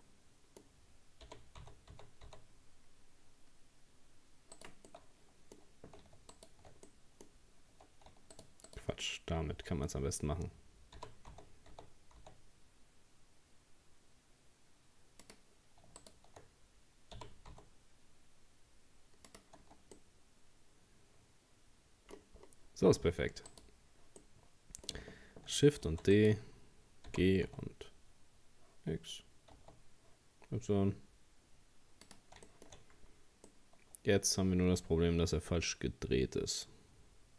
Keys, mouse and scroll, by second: 0.0-1.3 middle drag, 1.3 g, 4.9-6.3 middle drag, 6.3 shift+right click, 6.9 middle click, 7.4-8.4 scroll up 1, 8.4 shift+right click, 8.7 shift+right click, 9.0-11.0 middle drag, 11.0 g, 16.0 shift+right click, 17.2 g, 19.7 Tab, 20.0-22.2 middle drag, 22.2-23.5 scroll down 4, 23.5 right click, 24.2-25.9 middle drag, 25.9 shift+d, 27.1 g, 32.5 shift+middle click, 32.7-33.5 shift+scroll up 3, 33.5-36.5 middle drag.